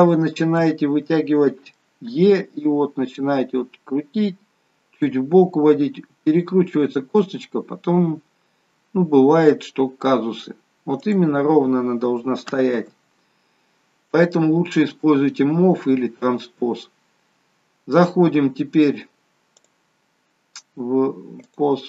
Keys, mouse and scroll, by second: 0.0 click, 0.6 middle click, 2.1 e, 12.8 ctrl+z, 16.8-17.7 scroll down 5, 19.5 click.